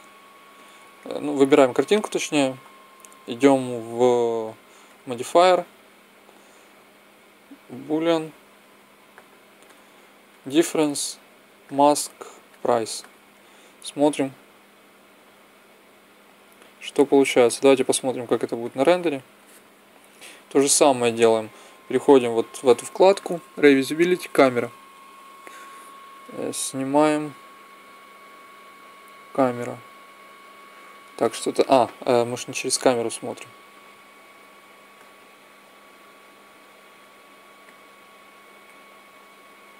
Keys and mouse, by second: 2.5-7.3 drag, 9.5-12.4 drag, 12.4 middle click, 14.0-15.8 drag, 17.3-19.2 drag, 19.2-21.8 middle drag, 21.8-23.6 drag, 23.6 middle click, 23.9-25.7 drag, 25.7 middle click, 32.5 KP_0, 36.6-39.4 drag.